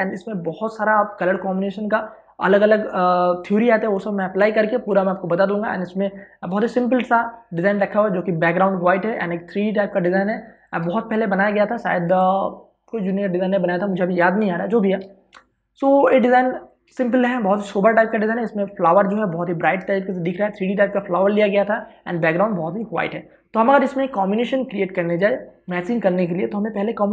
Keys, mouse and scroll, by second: 11.2 click, 11.5 space, 11.9 ctrl+click, 15.6 v, 16.1 space, 16.4 ctrl+click.